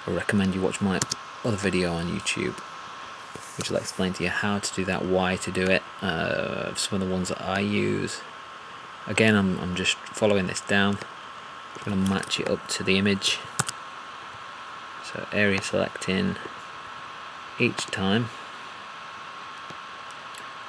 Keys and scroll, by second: 12.1 alt+`.